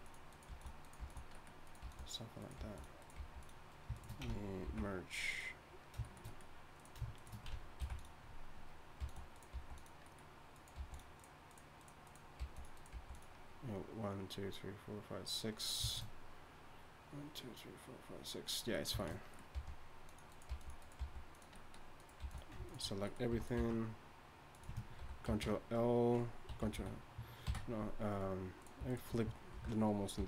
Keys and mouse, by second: 0.0-1.8 typing, 1.3 click, 3.2 g, 4.6 alt+m, 6.7-9.0 drag, 7.8 alt+m, 9.0 g, 9.3 click, 9.5 g, 10.7 g, 12.4 g, 12.9 g, 18.7-20.3 middle drag, 19.5 g, 20.3 right click, 20.5 g, 21.0 g, 22.2 g, 23.3 e, 23.5 s, 25.0 ctrl+l, 25.2 ctrl+n, 26.6 a, 26.7 a, 27.4 ctrl+n, 29.5 ctrl+l, 30.2 t.